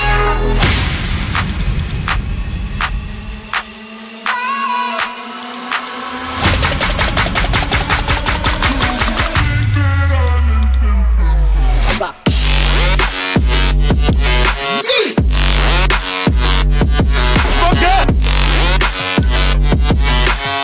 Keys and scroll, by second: 16.1 ctrl+alt+z, 16.3 ctrl+alt+z, 16.5 ctrl+alt+z.